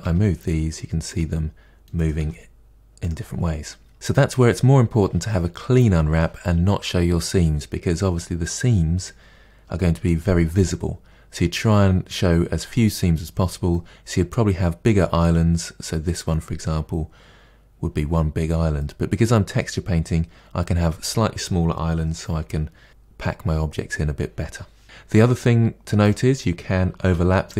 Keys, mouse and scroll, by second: 0.0 g, 2.0 click, 2.1 g, 7.3-12.9 scroll up 5, 13.7-26.0 middle drag, 26.0 click, 27.0 g.